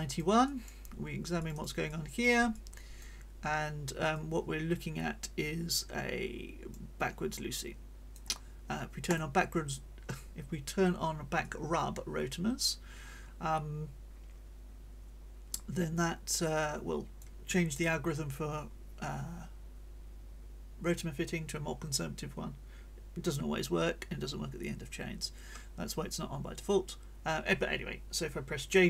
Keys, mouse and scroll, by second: 1.4-2.4 drag, 2.5 click, 4.1-6.9 drag, 7.0-7.6 scroll up 1, 7.6 click, 9.1 click, 11.4-17.4 drag.